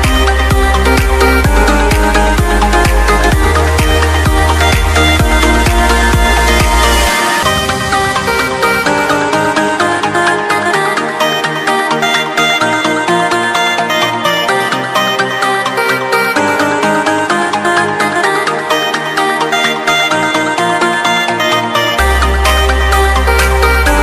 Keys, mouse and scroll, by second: 0.5-4.1 scroll down 1, 4.1 click, 15.1 click, 16.5 click, 21.3 click, 22.8 click.